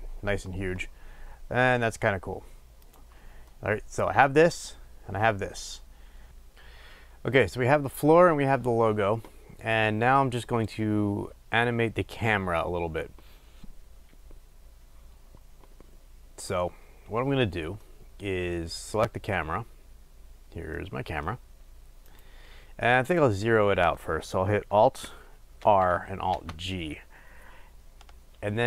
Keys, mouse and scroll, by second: 3.6-22.2 middle drag, 19.1-20.9 scroll down 2, 22.2 click, 23.2-28.6 middle drag, 28.2-28.6 scroll.